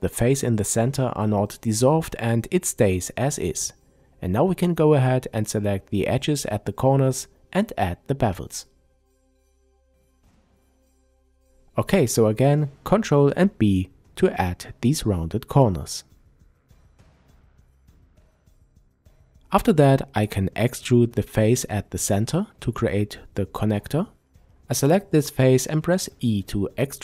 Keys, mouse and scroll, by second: 0.0-0.5 scroll down 2, 0.5-3.0 middle drag, 3.0 click, 3.4-3.8 scroll down 2, 3.8-5.7 middle drag, 5.7 shift+click, 7.0 shift+click, 7.6-9.8 middle drag, 8.8-9.8 scroll up 1, 9.8 shift+click, 11.1 ctrl+b, 16.2 click, 16.4-17.1 scroll down 1, 17.1-21.4 shift+middle drag, 19.5-21.4 scroll up 2, 21.4 click, 22.3 click, 23.5 e.